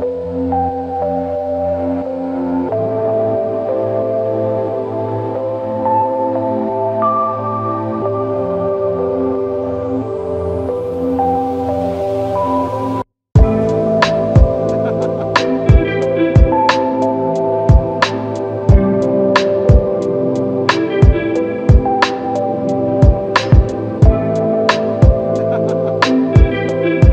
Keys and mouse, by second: 5.1 typing, 7.3 double click, 9.6 alt+shift+click, 11.6 double click, 13.5 alt+shift+click, 14.4 double click, 16.8 ctrl+alt+click, 17.7 alt+shift+click, 18.5 double click.